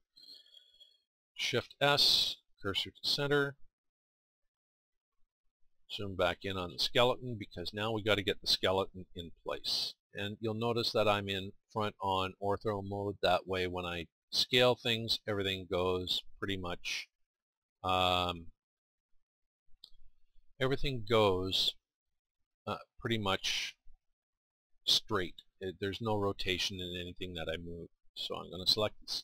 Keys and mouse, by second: 1.3 shift+s, 9.0 KP_1, 14.7-17.8 middle drag, 18.7-26.4 middle drag, 26.5 middle click, 28.4-29.2 middle drag.